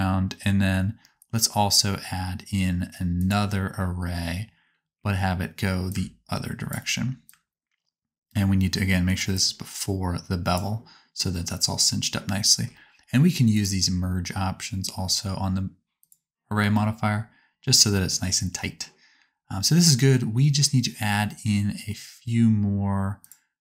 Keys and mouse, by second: 0.2 middle click, 2.0 middle click, 10.5-12.1 right drag, 13.5 click, 13.5 middle click, 13.5 right click, 16.0 click, 16.0 middle click, 16.0 right click, 17.1-23.4 drag, 23.2 right click.